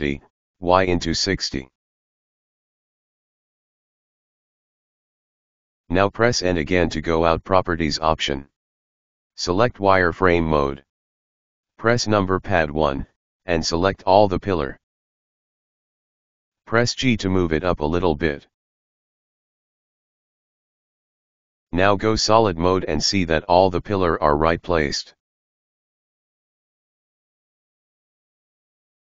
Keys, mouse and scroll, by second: 3.0 right click, 3.5-4.1 middle drag, 4.1 scroll down 1, 4.3-5.9 middle drag, 7.1 n, 8.6 click, 11.0 middle click, 11.7 KP_1, 12.7-15.4 drag, 15.4 g, 20.4-23.1 middle drag, 23.1 click, 23.4-24.6 middle drag, 24.6 KP_1, 25.8 right click, 26.1-28.5 middle drag, 28.5 KP_1.